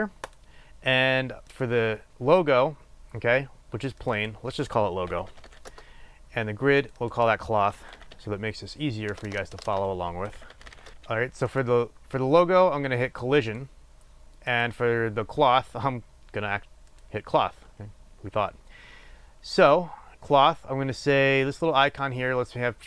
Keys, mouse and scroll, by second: 1.5 click, 4.2-12.7 drag, 5.8 Return, 9.3 BackSpace, 10.9 Return, 13.4 click, 14.4 click, 21.8-22.8 drag.